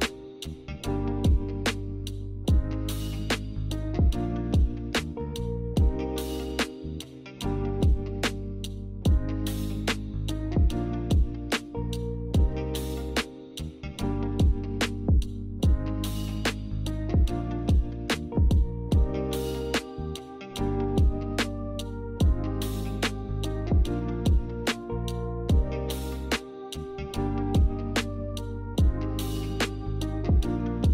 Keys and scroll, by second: 9.2 a, 10.5-11.4 typing, 14.7 z, 18.0 ctrl+z, 20.4 v, 21.3 a.